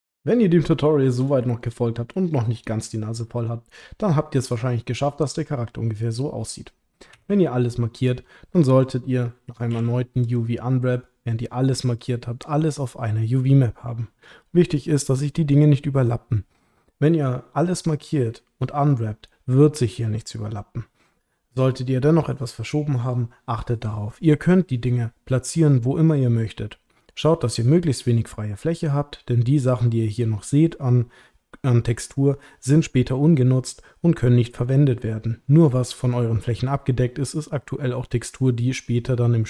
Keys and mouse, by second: 2.0-3.8 middle drag, 7.1 a, 9.7 u.